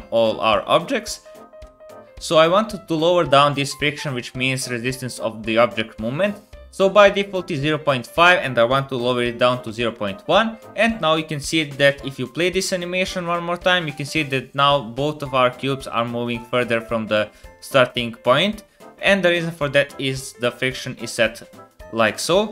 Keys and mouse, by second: 0.9 middle click, 10.8 space, 13.8-17.2 drag, 17.5 space, 22.1 middle click.